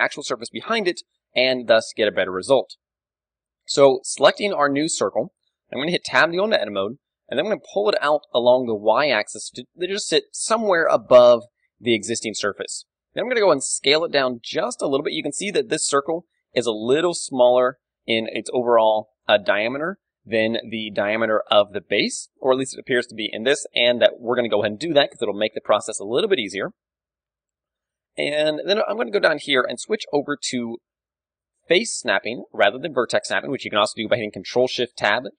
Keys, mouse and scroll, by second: 0.7 KP_3, 1.3-3.2 middle drag, 4.2-6.6 middle drag, 6.1 Tab, 7.7 g, 10.1-11.8 drag, 11.3 KP_1, 11.7 z, 11.8-14.3 middle drag, 13.3 s, 14.8-16.5 drag, 27.0-28.7 middle drag, 27.6 g, 28.7-30.4 drag, 30.7-32.5 drag, 34.5 ctrl+shift+Tab.